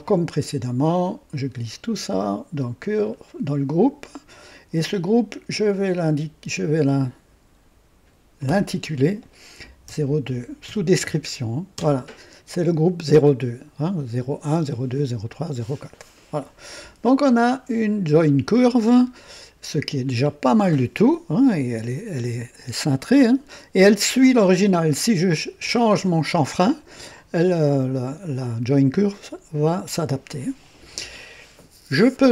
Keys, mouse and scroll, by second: 0.3-1.6 drag, 2.8 click, 5.5 click, 8.4 F2, 9.8 KP_0, 10.6 KP_2, 11.7 Return, 13.9 scroll down 2, 18.1 click, 21.4-24.1 drag.